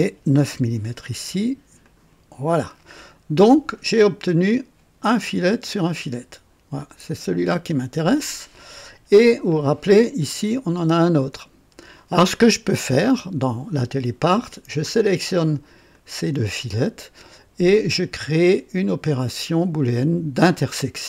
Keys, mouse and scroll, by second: 0.4 KP_9, 1.7 click, 5.0 click, 6.7 click, 10.2 click, 10.7 space, 15.9 ctrl+click, 20.4 click.